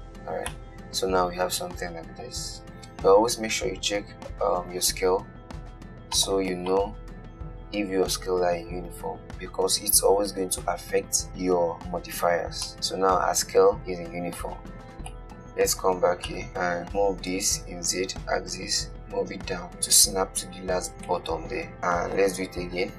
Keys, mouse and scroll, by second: 0.4-0.7 scroll down 1, 0.7-3.9 middle drag, 3.9 n, 4.9 n, 6.4 click, 7.0 click, 12.7-15.3 middle drag, 15.3 KP_1, 16.5 shift+middle click, 16.9 shift+d, 21.3 scroll down 1, 21.4-22.4 middle drag, 22.4 KP_1.